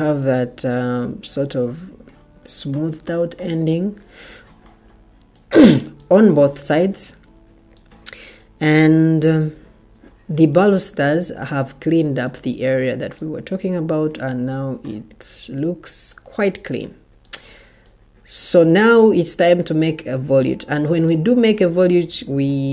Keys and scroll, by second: 22.6 Escape.